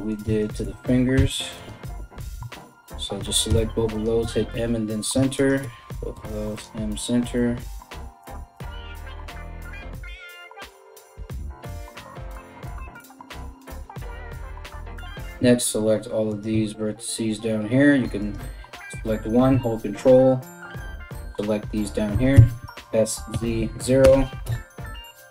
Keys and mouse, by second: 0.0 shift+click, 0.7 m, 1.8 click, 2.2 shift+click, 3.1 m, 4.6 shift+right click, 5.1-7.8 middle drag, 5.7 m, 7.8 right click, 7.9 shift+middle click, 8.1 right click, 8.3-14.4 middle drag, 8.9 m, 9.5 shift+right click, 9.8 m, 10.1 right click, 10.3 right click, 10.5 m, 10.6 right click, 10.7 right click, 11.0 m, 11.2 right click, 11.4 right click, 11.6 right click, 11.8 right click, 12.1 shift+right click, 12.3 m, 12.6 right click, 12.7 right click, 12.9 m, 14.4 right click, 14.5-15.9 middle drag, 15.9 ctrl+right click, 16.0-17.8 ctrl+middle drag, 17.8 right click, 17.9-20.0 middle drag, 20.0 ctrl+right click, 20.3-25.3 ctrl+middle drag, 21.7 s, 24.0 KP_Enter, 24.0 KP_3.